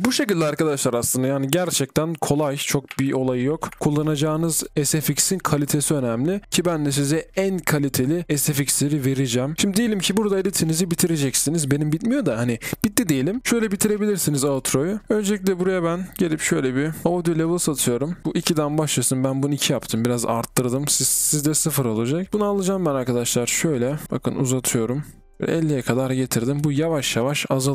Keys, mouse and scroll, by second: 0.0 b, 3.8 typing, 9.7 scroll down 1, 9.8-10.9 scroll up 1, 10.9-12.2 scroll down 1.